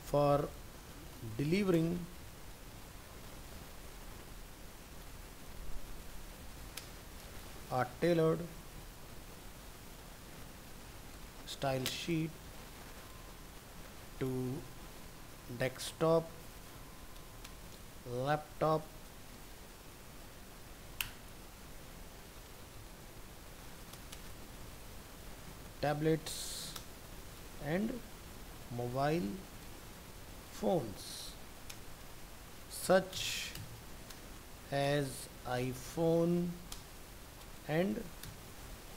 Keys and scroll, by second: 1.4 ctrl+Left, 21.7 ctrl+Left.